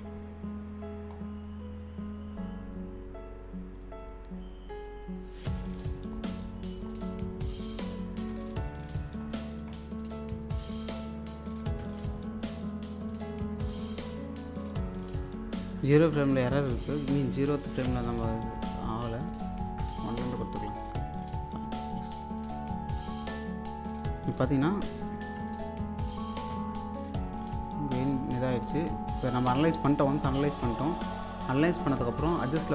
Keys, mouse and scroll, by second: 0.8-1.9 scroll down 1, 3.7 click, 5.4-5.8 scroll up 1, 7.9 click, 8.3 1, 8.9-9.7 scroll down 1, 10.0 alt+click, 11.8 1, 12.4 click, 13.0 2, 14.0 click, 17.5 click, 18.5 s, 18.7-19.4 scroll down 1, 19.4 click, 19.6 1, 21.5 click, 22.7 click, 23.8-24.6 scroll up 1, 25.1 click, 25.4 1, 26.0 click, 26.5 2, 27.4 click, 28.1-28.7 scroll down 1, 29.0 alt+click, 31.2 click.